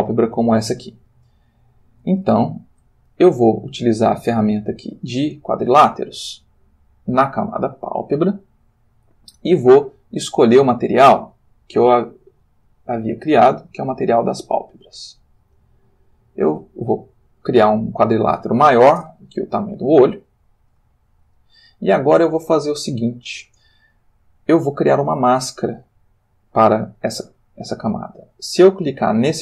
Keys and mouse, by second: 1.2 shift+middle click, 2.4 ctrl+shift+middle click, 4.8 click, 10.4 click, 11.6 click, 13.3 click, 15.3-18.1 drag, 19.0 Return, 20.1 ctrl+click.